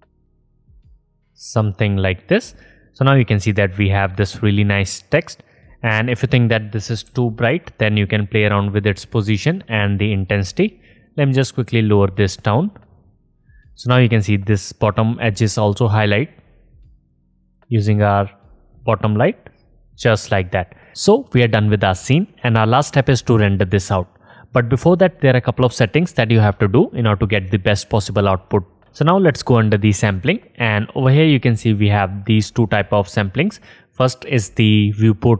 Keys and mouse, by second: 3.4-5.7 drag, 5.7 middle click, 5.9-7.9 drag, 7.3 g, 8.3 click, 8.9-10.0 drag, 10.4 click, 17.4 click, 17.8 click, 18.7 click, 19.1-20.1 drag, 20.3-20.9 drag.